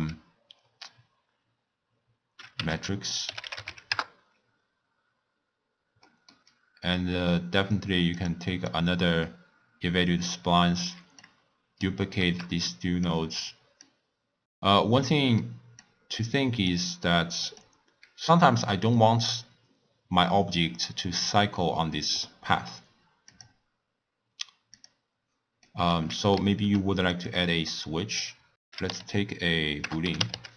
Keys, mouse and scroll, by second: 6.0-7.0 middle drag, 7.0 click, 8.2 click, 8.7-11.2 drag, 12.3 shift+d, 13.8 drag, 14.3 middle click, 14.4-15.1 scroll up 4, 15.1-15.8 middle drag, 15.8 click, 16.7 click, 17.4 click, 20.0-21.5 scroll down 2, 21.5-23.3 middle drag, 23.3 click, 24.7 click, 25.6-27.1 middle drag, 27.1-28.5 drag, 28.5 BackSpace, 30.3 o.